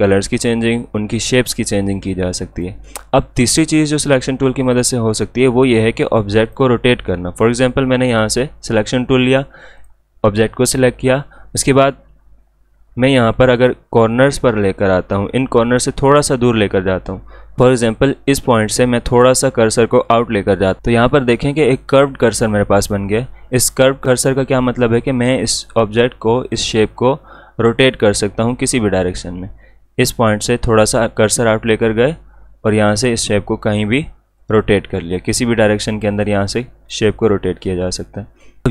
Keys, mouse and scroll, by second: 2.5 click, 13.1 click, 17.6 ctrl+z, 25.4-30.4 drag, 31.7-38.4 drag.